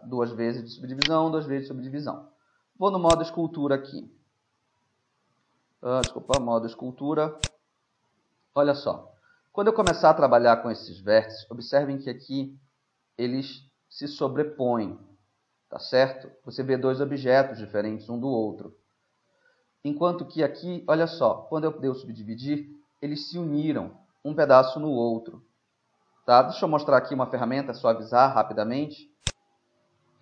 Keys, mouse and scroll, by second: 1.1-2.8 middle drag, 1.1-2.8 right drag, 3.1-4.9 drag, 6.4-8.2 drag, 8.2 middle click, 9.9-11.9 drag, 12.5 middle click, 18.9 ctrl+z, 29.3-30.2 drag.